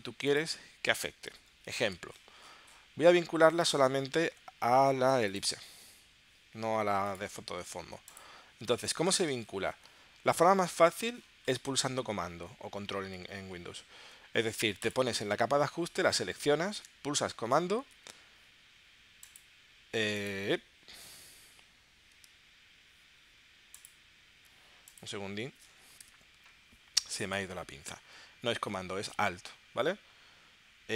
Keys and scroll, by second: 26.0 shift+super+p.